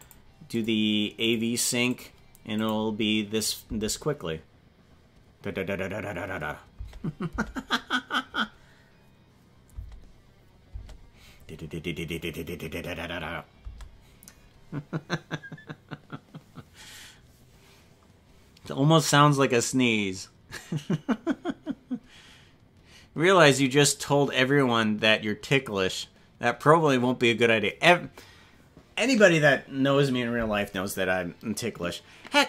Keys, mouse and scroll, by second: 2.7 click, 3.1 scroll up 2, 3.7 space, 6.9 space, 7.3 space, 9.9 space, 10.7 space.